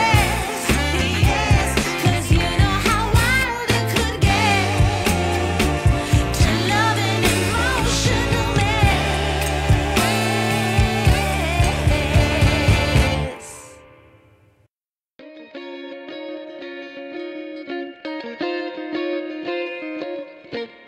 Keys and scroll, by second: 4.0 3.